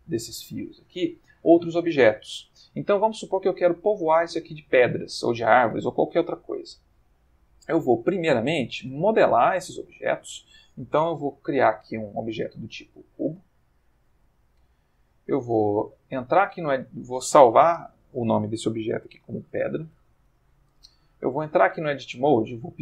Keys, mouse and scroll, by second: 1.1 click, 7.4-8.1 middle drag, 8.1 ctrl+middle click, 8.6 ctrl+middle click, 9.5 click, 11.1 shift+a, 12.5 click, 13.1 g, 14.0 shift+click, 14.3-16.7 shift+middle drag, 17.6 F2, 19.5-20.0 typing, 20.1 shift+Return, 21.3 Tab, 21.8 right click, 22.5 click.